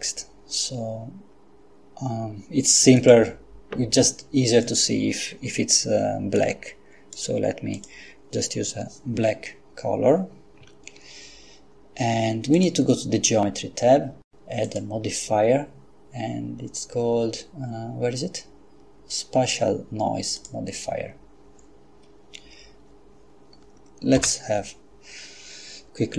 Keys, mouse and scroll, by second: 3.0 click, 4.5 click, 6.4-7.6 drag, 7.7 click, 10.6 Escape, 12.6 click, 14.6 click, 20.4 click, 24.2 F12.